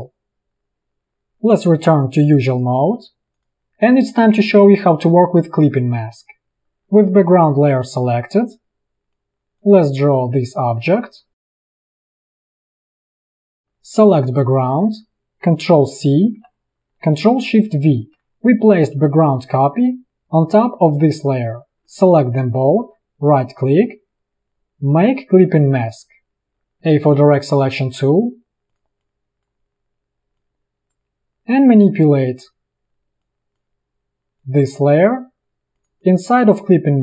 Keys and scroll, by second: 6.6 p, 16.3 ctrl+c, 17.9 ctrl+shift+v, 26.9 a.